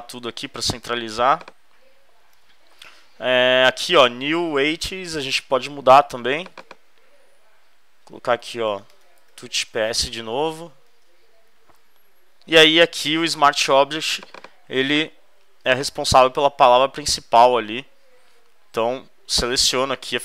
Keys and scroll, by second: 0.0 super+v, 0.8 v, 2.3 super+d, 8.8-10.6 typing, 10.7 shift+super+s, 11.0 shift+super+Return, 11.5 super+Return.